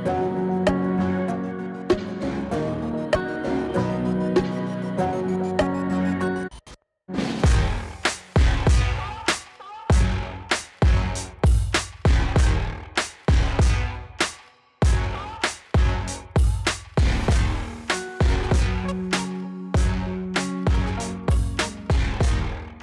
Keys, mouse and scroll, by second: 0.7 space, 4.0 space, 4.8-5.4 drag, 10.4 click, 12.9 click, 15.6 click, 15.7 Return, 17.8 click, 19.3-22.8 typing.